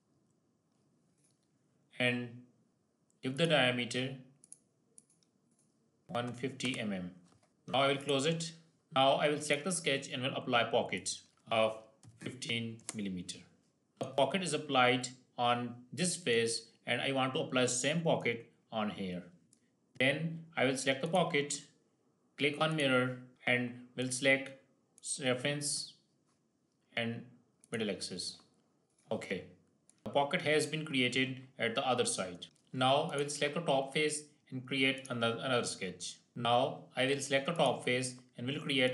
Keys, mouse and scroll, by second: 3.3 click, 7.9 click, 9.3 click, 13.8-19.4 middle drag, 19.7-20.9 middle drag, 20.9 click, 23.9 click, 27.5 click, 29.8 middle click, 32.4 shift+middle click, 32.9 click, 36.3 scroll down 1, 37.6 click.